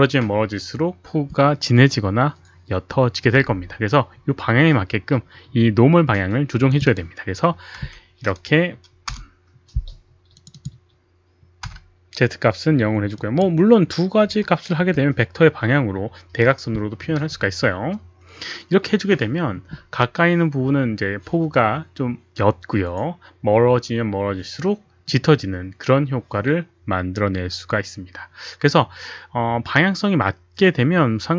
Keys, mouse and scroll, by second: 6.6 click, 7.7 1, 9.0 Return, 9.7 click, 10.3 click, 11.7 Return, 11.7 click, 11.7 KP_1, 11.7 KP_0, 11.7 1, 13.3 click, 14.2 KP_0, 14.8 Return.